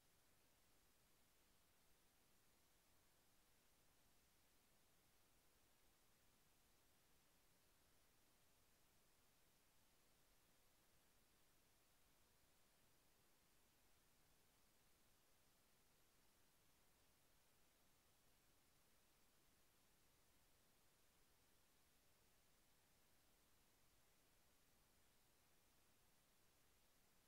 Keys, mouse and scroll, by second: 4.8 click, 8.4 ctrl+click, 11.0 KP_Enter, 15.1 click, 16.4 click, 17.1 click, 21.3 ctrl+click, 24.4 KP_Enter.